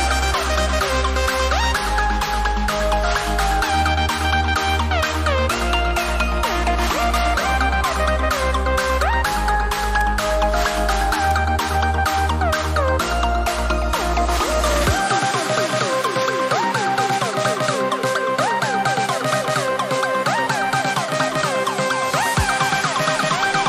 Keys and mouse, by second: 8.5 x, 8.8 click, 13.5-14.8 typing, 16.0 click.